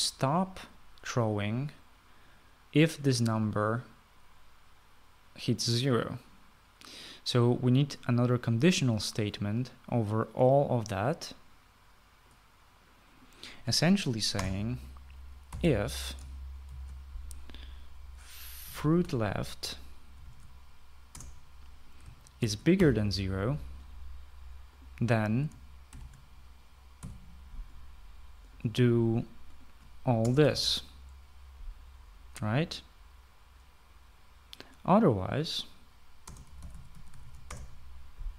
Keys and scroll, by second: 0.1 typing, 15.3 Return, 16.2-17.6 typing, 19.4-21.3 typing, 22.1 Return, 23.1-23.8 typing, 26.8 shift+[, 28.0 Delete, 31.2 Return, 31.4 }, 37.2-38.3 typing.